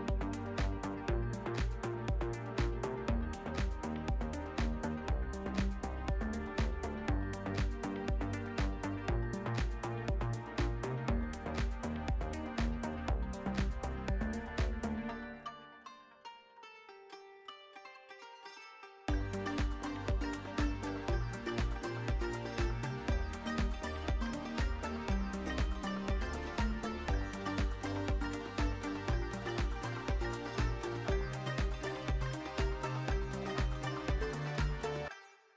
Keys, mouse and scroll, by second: 0.4 click, 0.8 a, 1.2 click, 1.6 s, 2.3 click, 2.5 Tab, 3.2 Tab, 3.8 click, 4.3 s, 4.8 click, 5.0 Tab, 5.6 Tab, 6.0 click, 6.6 s, 7.0 click, 7.1 Tab, 8.2 Tab, 9.1 click, 10.1 s, 10.9 click, 11.3 a, 11.7 click, 12.1 s, 12.8 Tab, 13.9 Tab, 14.8 click, 15.1 s, 15.9 click, 16.0 Tab, 16.7 alt+shift+middle drag, 17.0 alt+z, 17.3-18.4 alt+middle drag, 19.0 `, 19.8 alt+shift+middle click, 20.3 Tab, 23.0 Tab, 25.0 shift+middle click, 25.5 Tab, 26.0 ctrl+r, 29.2 click, 29.7 ctrl+e, 30.5 ctrl+r, 32.2 click, 32.5 Tab, 32.9-33.6 alt+middle drag, 33.8 `.